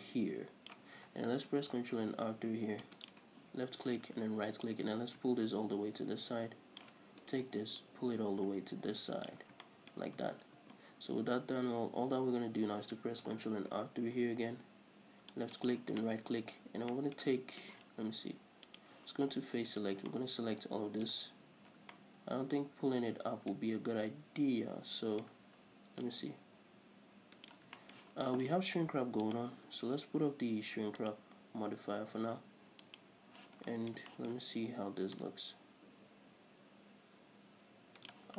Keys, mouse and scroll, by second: 1.8 ctrl+r, 3.4 right click, 4.2 alt+right click, 4.9-7.5 drag, 7.5 alt+right click, 8.1-9.9 drag, 9.7 scroll down 1, 9.9-19.0 shift+middle drag, 10.4 scroll up 1, 10.5 Tab, 11.2-11.5 scroll up 2, 13.5 ctrl+r, 16.9 scroll up 1, 19.0 click, 20.0 right click, 20.4-26.3 middle drag, 26.3-27.9 drag, 27.9 right click, 28.0-29.5 shift+middle drag, 29.5 click, 31.3 click, 33.1 click, 34.0-35.4 middle drag, 35.4-38.3 drag.